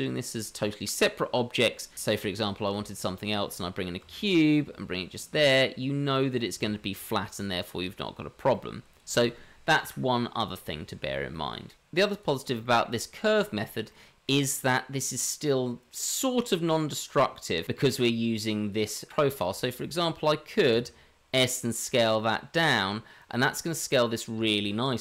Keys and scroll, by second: 2.6 shift+a, 4.5 g, 9.8 Delete, 20.7 s.